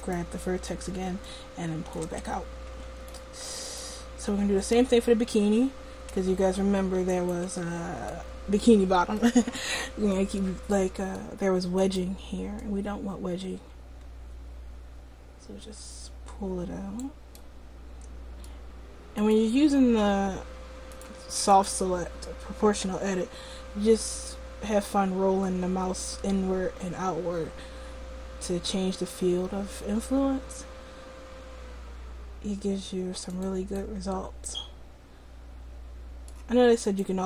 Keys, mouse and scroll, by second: 1.3-3.1 drag, 2.2 Tab, 6.4 Tab, 6.9 Tab, 7.5 Tab, 12.7-14.4 drag, 12.7 right click, 19.2-23.9 right drag, 22.8 g, 33.8-35.7 middle drag, 36.9-37.2 middle drag.